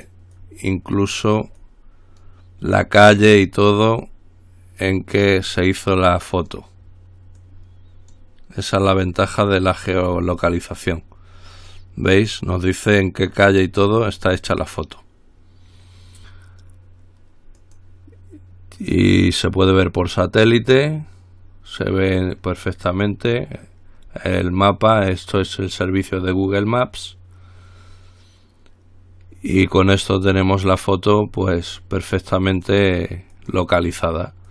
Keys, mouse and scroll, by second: 0.6-1.8 drag, 1.9-2.9 drag, 5.0 click, 5.9-7.2 drag, 7.6-8.8 drag, 9.0-10.1 drag, 10.2-11.6 drag, 11.9-12.9 drag, 14.0 click, 17.8 click, 19.9 click, 32.7 click.